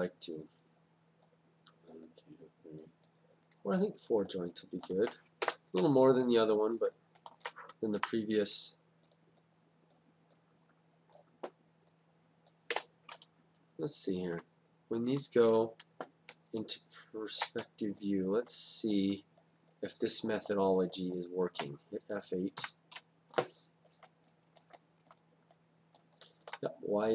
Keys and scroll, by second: 5.5 Return, 8.0 y, 12.8 Return, 14.5 Down, 16.3 space, 22.6 F8.